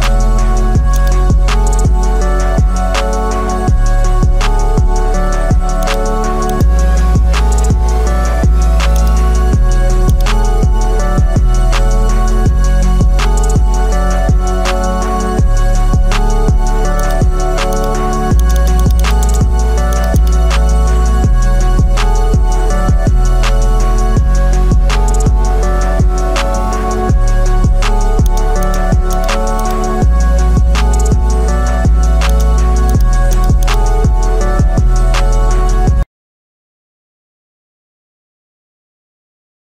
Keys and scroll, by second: 2.9 Return.